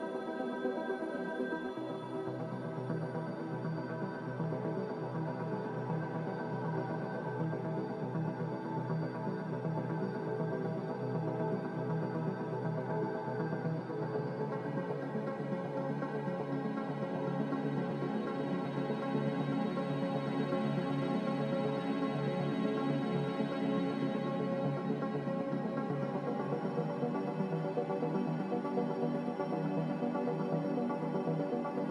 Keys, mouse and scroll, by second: 2.4 z, 5.9-7.2 typing, 11.2-11.9 typing, 20.3 ctrl+z, 20.6 ctrl+z.